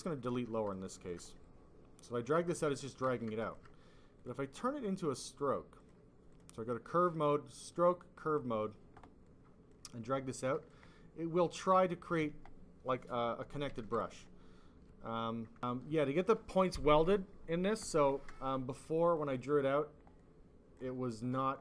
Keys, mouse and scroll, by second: 0.0 click, 0.2 click, 0.6 click, 1.0 alt+double click, 1.3 click, 2.6 click, 3.0 ctrl+z, 3.4 alt+click, 4.1 click, 4.4 click, 5.8 click, 6.2 click, 8.2 click, 9.2 click, 10.5 alt+click, 10.8 click, 11.7 alt+click, 13.7 ctrl+z, 15.5 click, 17.7 click, 19.0 click, 20.1 click.